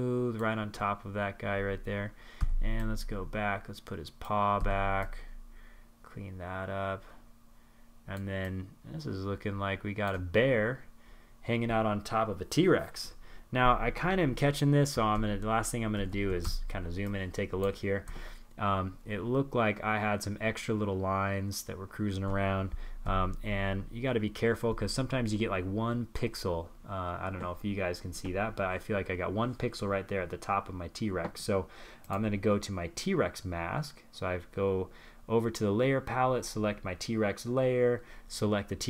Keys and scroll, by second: 13.0 super+=, 13.9 super+=, 20.8 super+-, 21.0 super+-, 21.4 super+-.